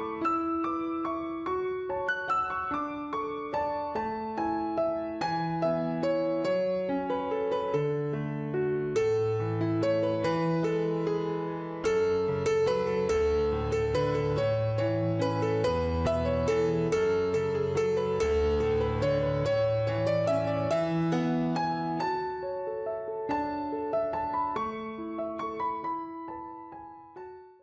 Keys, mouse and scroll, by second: 1.1 click.